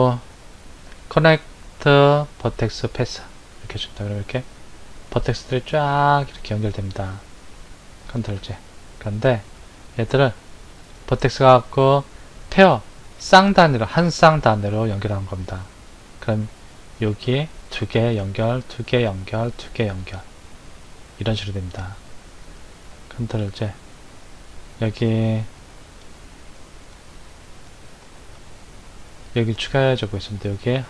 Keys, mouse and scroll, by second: 8.4 ctrl+z, 10.8-13.9 drag, 22.7 ctrl+z, 26.1 ctrl+click, 28.3 shift+click.